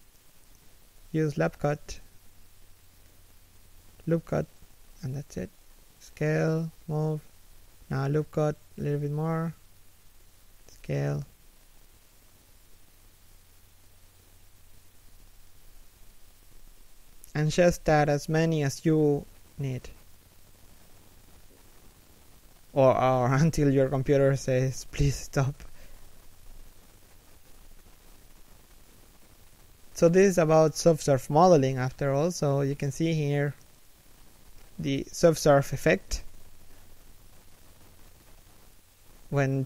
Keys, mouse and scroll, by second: 0.4 a, 1.1 k, 5.2 s, 6.7 g, 7.7 a, 8.2 k, 9.8 a, 10.3 alt+right click, 10.6 s, 11.7 alt+right click, 12.1 s, 13.1 g, 13.6 s, 14.7 scroll down 1, 15.0 middle click, 15.9 3, 16.2 KP_1, 16.7 scroll up 1, 17.6 z, 18.0 shift+middle click, 18.3 z, 19.7 middle click, 20.5 a, 20.7 KP_3, 21.1 KP_1, 21.7 alt+right click, 22.0 z, 22.2 scroll down 1, 22.6 alt+shift+middle click, 24.2-24.5 scroll up 1, 24.5 right click, 24.6 g, 25.1 middle click, 26.2 scroll up 1, 26.7 middle click, 27.6 g, 28.3 shift+right click, 28.5 g, 29.3-29.9 scroll up 1, 29.9 shift+middle click, 31.3 z, 34.6 right click, 34.9 g, 35.9 g, 38.2 right click, 38.3 g.